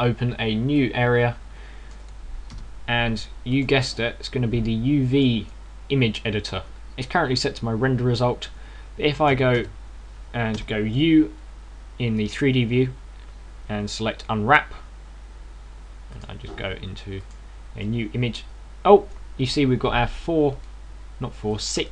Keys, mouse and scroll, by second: 1.6 click, 3.3 t, 10.2 a, 10.4 a, 11.4 u, 18.1 click, 20.9 right click, 21.4 right click.